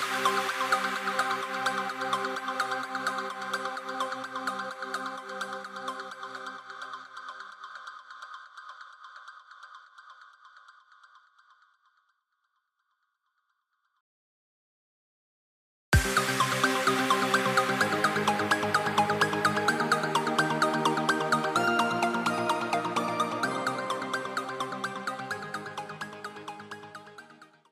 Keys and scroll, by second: 0.9 super+f, 2.6 super+g, 6.4 v, 6.7 shift+super+[, 8.6 i, 9.3 v, 12.6 i, 13.7 v, 13.9 super+2, 19.3 alt+super+0.